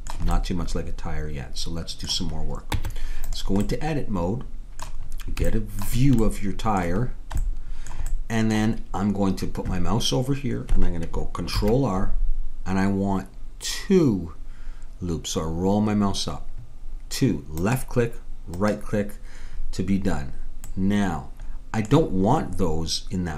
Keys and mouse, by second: 2.8 Tab, 6.0-9.9 middle drag, 11.6 ctrl+r, 20.7-23.3 middle drag.